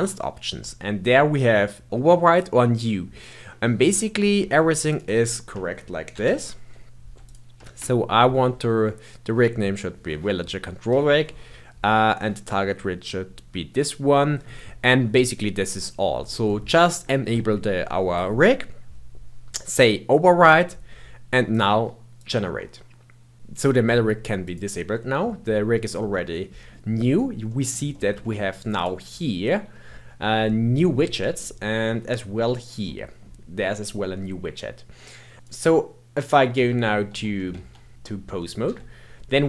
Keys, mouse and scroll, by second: 0.0-2.3 scroll down 5, 4.9-10.3 drag, 22.1-23.5 drag, 24.4 click, 26.0-27.1 middle drag, 27.1-27.4 scroll up 3, 27.4-28.7 middle drag, 28.7 click, 29.7-30.9 scroll down 2, 30.9-31.3 scroll down 1, 31.3-32.5 shift+middle drag, 32.5 click, 32.8-35.3 middle drag, 35.3 click, 36.6 Tab, 37.0 Tab, 37.9 click, 38.6 g.